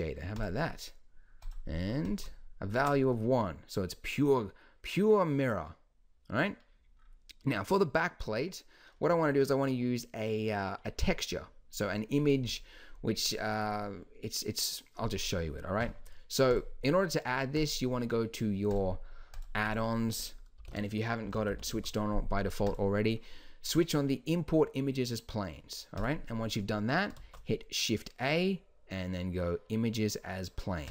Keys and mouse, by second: 16.5-19.6 drag, 27.3 shift+a.